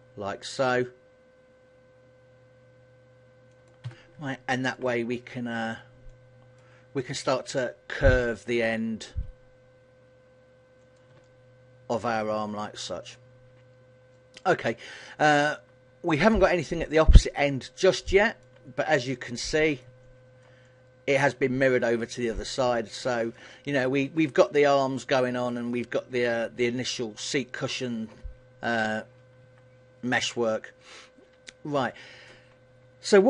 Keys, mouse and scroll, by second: 3.8 click, 4.0 a, 4.3 middle click, 5.7 alt+right click, 6.1 middle click, 7.3 KP_1, 8.7 s, 11.1 click, 11.3 middle click, 12.2 a, 12.6 middle click, 14.4 middle click, 16.7 shift+middle click, 17.6 middle click, 18.9-19.3 scroll down 3, 19.4 middle click, 19.9 shift+middle click, 20.7 middle click, 23.0 shift+middle click, 23.6 middle click, 25.5 middle click, 29.5 KP_1, 30.5 shift+middle click, 33.1 middle click.